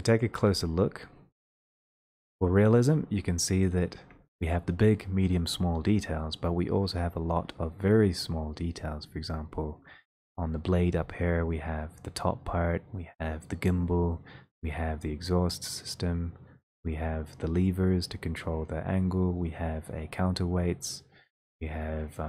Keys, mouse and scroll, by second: 0.7 ctrl+middle click, 1.0 ctrl+middle click, 2.4 ctrl+middle click, 6.7 ctrl+scroll, 7.2 middle click, 9.3 middle click, 9.6 middle click, 9.6 middle click, 9.7 middle click, 10.0 middle click, 10.1 middle click, 14.0 scroll, 14.1 middle click, 14.8 click, 16.1 click, 20.6 click, 20.7 click.